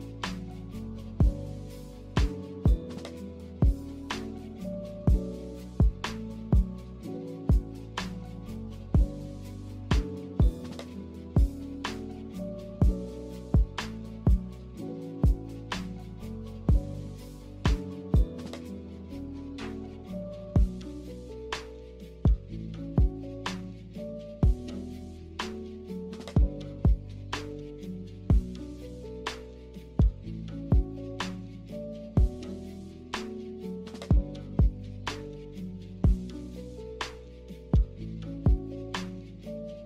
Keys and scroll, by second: 0.3 1, 3.5 Delete, 12.3 Delete, 20.5 Delete, 25.8 d, 28.2-29.0 typing, 30.3 typing, 31.8 a.